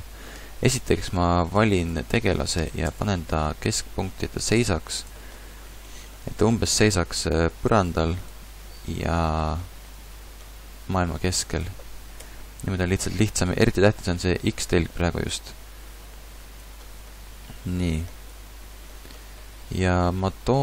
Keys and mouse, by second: 0.4 b, 1.2 b, 2.6 b, 2.6 KP_3, 2.9 KP_5, 3.8 g, 11.1 g, 12.2 KP_1, 18.5 a.